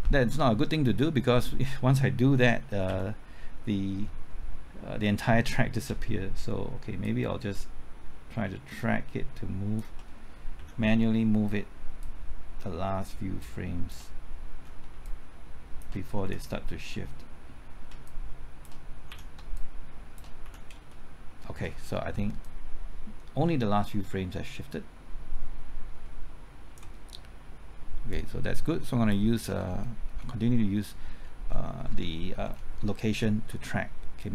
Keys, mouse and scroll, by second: 2.9 Left, 6.3 typing, 7.0 shift+click, 10.6 shift+Left, 11.7 typing, 12.0-13.9 shift+drag, 14.4 shift+Left, 15.0 shift+click, 16.2 shift+Left, 18.0 shift+click, 19.1 shift+Left, 19.5 shift+click, 20.4 shift+Left, 20.8 shift+Return, 22.4-29.4 drag, 29.4-30.0 scroll down 1, 30.0-30.6 scroll up 1, 30.6 middle click, 31.1-32.4 scroll up 1, 32.4-33.1 scroll down 1, 33.5-34.3 scroll up 1.